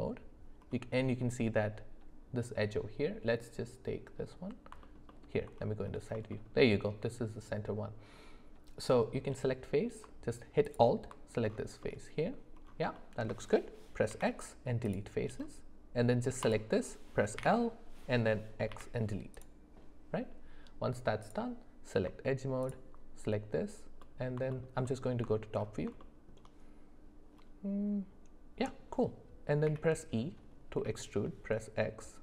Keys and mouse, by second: 5.1 alt+middle click, 6.3 shift+middle click, 11.8 middle click, 13.0 shift+middle click, 16.4 click, 18.7 x, 21.2 click, 22.6 alt+click, 24.0 middle click, 24.5 alt+middle click, 24.8 alt+middle click, 26.0 shift+middle click.